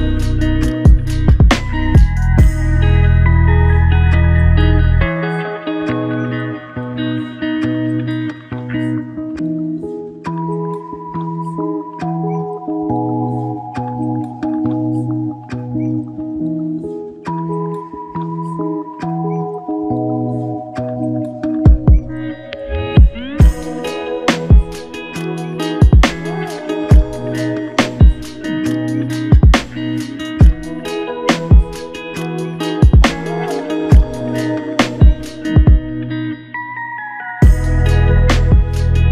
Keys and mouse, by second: 1.3 ctrl+z, 5.1 double click, 15.6 ctrl+click, 18.1 ctrl+click, 21.5 alt+click, 27.9 alt+click, 29.8 alt+click, 32.4 double click, 34.7 alt+click.